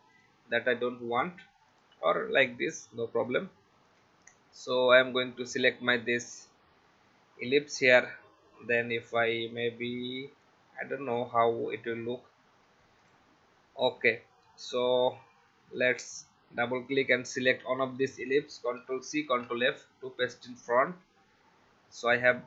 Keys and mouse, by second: 0.1 click, 1.7 click, 3.3 click, 13.0 click, 15.8 click, 18.7 ctrl+c, 19.3 ctrl+f, 22.1 alt+shift+click.